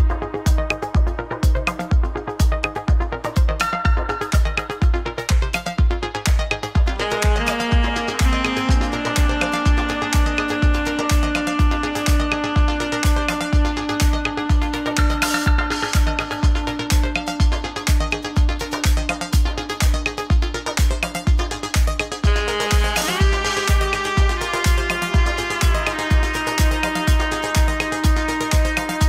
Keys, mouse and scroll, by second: 0.6 click, 2.7 shift+click, 3.2 shift+click, 3.9 shift+click, 4.3 shift+click, 4.8 shift+click, 5.1 shift+click, 5.7 g, 7.4 click, 9.1 click, 9.7 click, 10.9 click, 12.2 click, 13.4 click, 13.9 click, 14.8 click, 18.0 click, 18.4 click, 20.0 click, 20.3 click, 20.8 click, 21.1 click, 22.1 click, 23.3 Tab, 24.9 click, 25.8 click, 25.9 click, 26.7 click, 27.6-28.9 drag.